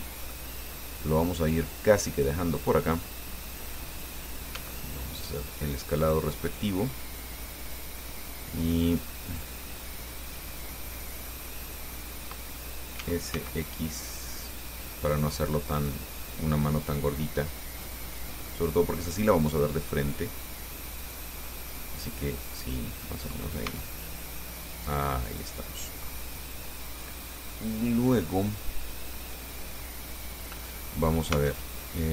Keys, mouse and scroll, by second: 0.8-1.1 scroll up 1, 1.4-1.7 scroll down 1, 2.1 middle click, 3.7 middle click, 4.8 s, 6.3 click, 7.1-8.2 drag, 8.4-9.5 middle drag, 10.6-12.7 middle drag, 13.2 s, 13.6 x, 16.0 click, 17.0-18.6 drag, 18.7-20.1 middle drag, 20.2-23.6 middle drag, 23.9 s, 25.5 click, 25.9 middle click, 30.9 middle click, 31.5 Tab, 32.0 middle click.